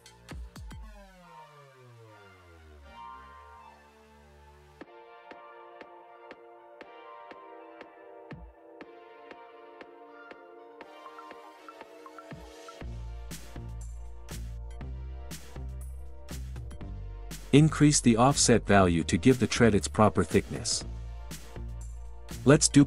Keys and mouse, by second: 2.8 middle click, 7.6 click, 8.5 middle click, 17.8 click, 20.8-22.1 drag, 22.2-22.8 middle drag.